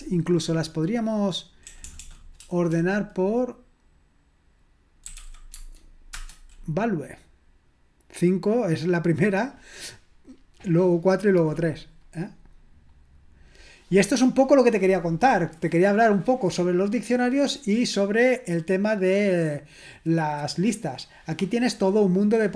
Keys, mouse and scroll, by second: 1.8 BackSpace, 2.0 BackSpace, 5.3-6.0 typing, 6.1 Return.